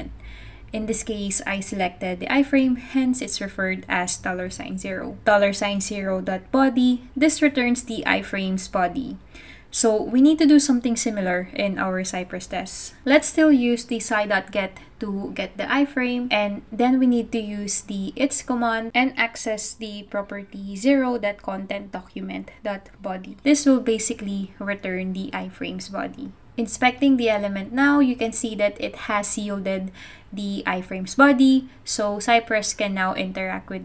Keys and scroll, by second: 0.6 typing, 5.4-6.5 typing, 13.3-14.0 typing, 16.5-26.6 typing.